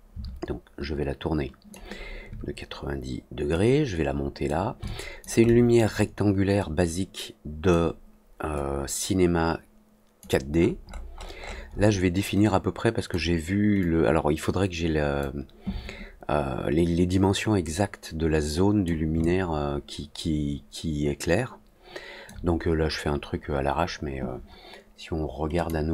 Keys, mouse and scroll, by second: 3.5 click, 4.8 alt+click, 5.4 alt+middle click, 6.5-7.6 drag, 8.5-10.1 drag, 10.5-11.8 scroll up 4, 11.1 middle click, 12.4 click, 13.7-15.1 drag, 17.6-18.8 drag, 19.1-22.2 alt+drag, 25.5 click.